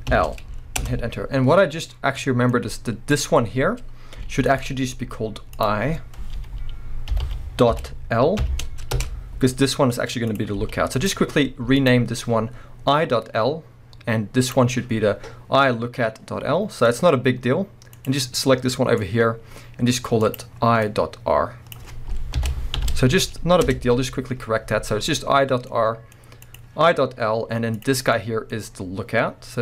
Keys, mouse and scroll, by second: 0.9 Return, 1.7-2.2 scroll up 2, 2.2-3.1 middle drag, 3.1 click, 4.3 g, 4.6 right click, 5.5-10.4 drag, 9.0 Return, 10.6 g, 11.1 right click, 11.8 click, 14.4 click, 16.6 scroll down 1, 16.8-17.9 middle drag, 17.1 scroll up 1, 17.9-18.4 drag, 18.4-20.2 middle drag, 20.2-25.7 drag, 23.7 Return, 25.7-26.4 middle drag, 26.4 click, 27.7 click, 28.0 scroll down 1, 28.1-29.6 middle drag, 28.6-29.6 scroll up 2.